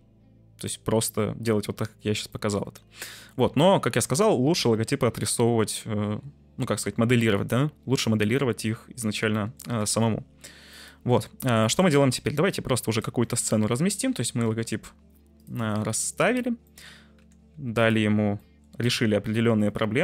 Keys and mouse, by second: 2.4 middle click, 3.0-3.3 middle drag, 4.1 middle click, 8.1 middle click, 9.3-9.7 middle drag, 9.7 g, 9.9 z, 11.7 middle drag, 11.9 shift+a, 13.5 middle click, 14.1 s, 15.3 click, 16.7 middle drag, 17.5 Tab, 17.5 2, 17.7 middle click, 18.4 middle click.